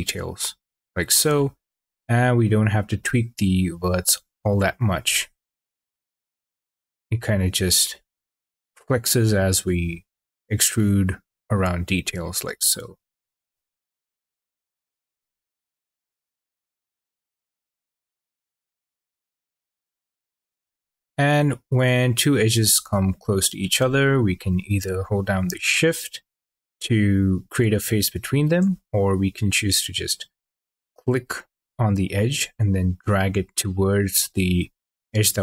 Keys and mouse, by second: 0.2 click, 1.3 shift+middle drag, 3.7 click, 5.3 click, 6.5 click, 8.8 click, 10.6 click, 12.4 click, 13.8 click, 18.0 click, 21.3 shift+drag, 32.0 click.